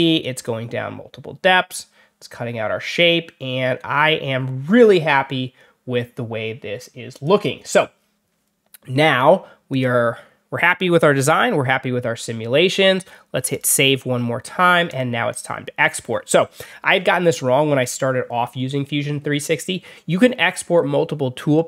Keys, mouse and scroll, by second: 7.0 click, 9.6 click, 11.1 click, 13.4 click, 14.8 click, 15.2 click.